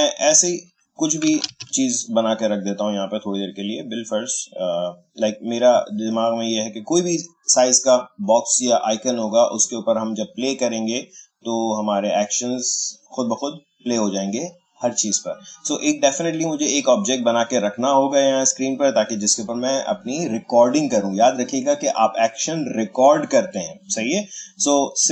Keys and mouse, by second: 1.4 ctrl+z, 4.1-8.7 drag, 17.3 click, 25.0-25.1 drag.